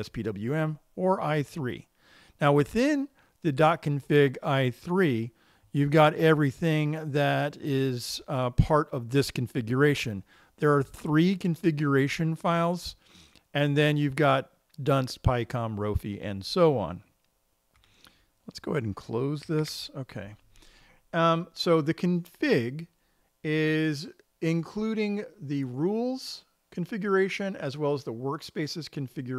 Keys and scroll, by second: 20.1 super+q.